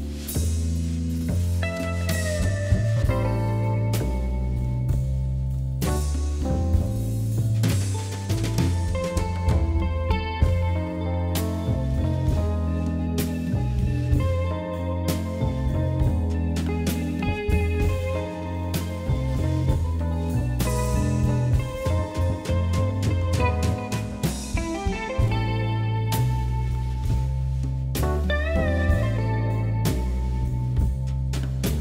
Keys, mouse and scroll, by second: 0.2 click, 0.8 shift+z, 1.0 drag, 1.3-1.8 middle drag, 1.8 scroll up 1, 2.0-3.5 middle drag, 4.2 KP_1, 5.1 shift+a, 6.7 s, 7.6 s, 8.6 g, 9.7 s, 11.1 KP_7, 11.6 s, 12.9 g, 14.6 KP_Divide, 15.2 KP_1, 15.9 Tab, 16.2 click, 16.9 Tab, 17.2 ctrl+a, 17.6 Tab, 18.1 click, 19.5 middle click, 20.0-20.6 scroll up 2, 20.6 e, 21.9 click, 22.8 g, 25.8 click, 26.8 shift+click, 28.2 click, 28.8 e.